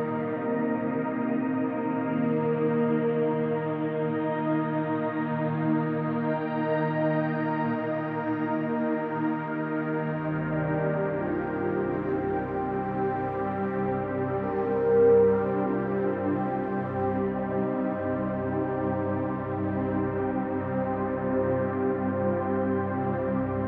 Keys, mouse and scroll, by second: 0.4-7.8 drag, 7.9 click, 8.5 ctrl+alt+click, 11.0 ctrl+alt+click, 11.8-14.3 alt+drag, 14.6 ctrl+alt+click, 15.0 alt+click, 17.1 click, 19.9 ctrl+alt+click, 20.7 alt+click, 21.3 ctrl+s, 23.0-23.6 alt+drag.